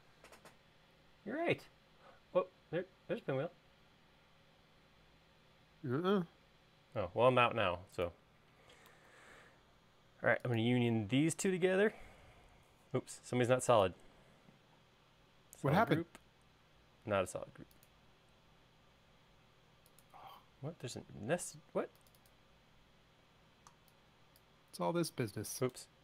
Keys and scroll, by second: 7.6 space, 9.3 super+s, 13.5 space.